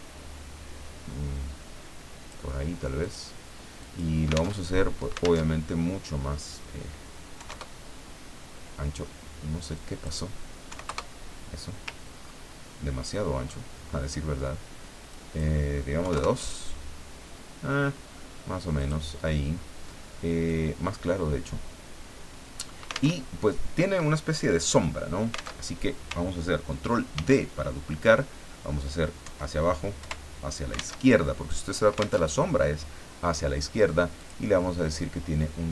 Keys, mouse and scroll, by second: 3.0 click, 3.8 click, 4.5 alt+Tab, 5.4 alt+Tab, 7.3 KP_5, 7.5 KP_Enter, 9.7 click, 10.7 KP_5, 10.8 KP_Enter, 12.2-12.7 ctrl+scroll up 2, 13.2 ctrl+click, 13.3 ctrl+middle click, 13.7 ctrl+scroll down 2, 15.1 click, 16.0 KP_2, 16.1 KP_Enter, 18.8 click, 20.5-22.8 drag, 23.1 alt+Tab, 25.6 alt+Tab, 27.1 ctrl+d, 29.2 Down, 30.0 Left, 31.0 alt+Tab, 32.2 alt+Tab, 34.2 click.